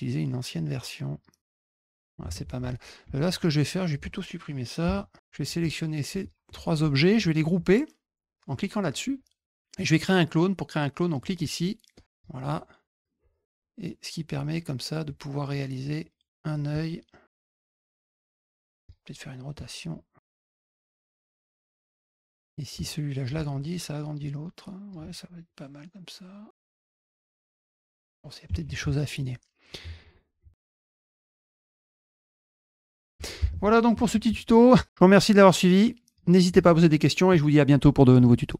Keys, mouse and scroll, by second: 1.0 click, 1.5 click, 2.5 click, 3.2 shift+click, 3.8 shift+click, 5.5 shift+click, 6.1 shift+click, 8.4 click, 11.1 click, 11.9 click, 13.1 click, 14.3 click, 15.0-16.4 drag, 16.7 click, 17.7 click, 18.8 click, 19.5 click, 20.1 drag, 20.6 drag, 21.1 click, 21.3 click, 21.7 drag, 22.2 click, 22.6-23.2 ctrl+drag, 24.1-24.8 drag, 25.4-26.5 drag, 26.8 click, 27.0 click, 27.8 click, 29.4 middle click, 30.3 click, 30.6 drag, 30.7 ctrl+click, 30.7 click, 30.8 ctrl+drag, 30.9 click, 31.0 click, 31.1 click, 31.4 ctrl+click, 31.5 ctrl+z, 31.5 drag, 31.7 ctrl+shift+drag, 32.1 click, 32.1 click, 32.4 click, 32.5 click, 32.5 F1, 32.5 ctrl+shift+click, 32.7 click, 32.9 click, 33.0 drag, 33.3 F1, 34.8 middle click, 35.7 middle drag, 37.0 click, 38.5 click.